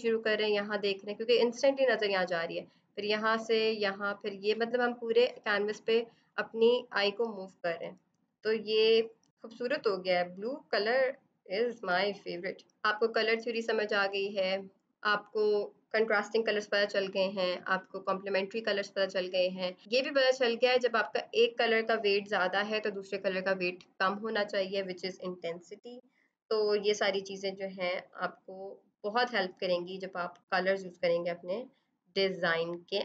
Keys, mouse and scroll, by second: 6.2 click, 12.7 click, 19.8-20.7 scroll.